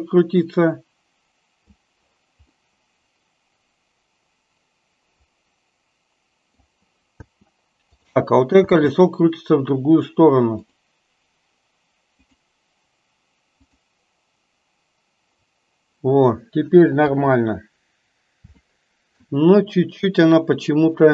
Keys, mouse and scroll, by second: 0.0-1.9 drag, 2.8-6.7 middle drag, 7.3 space, 7.9 click, 8.8 space, 10.8 click, 13.8 click, 17.0 KP_3, 18.8-19.4 shift+middle drag.